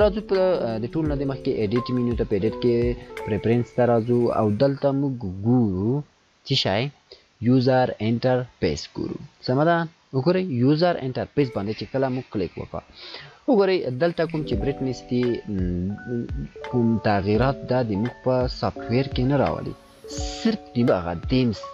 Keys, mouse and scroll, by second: 16.6-19.7 click.